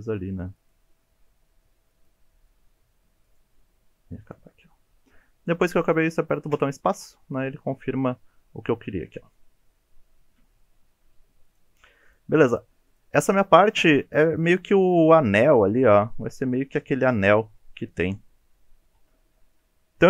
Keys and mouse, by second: 10.9 3, 11.4 click, 12.4 shift+click, 12.9 shift+click, 19.0 ctrl+z.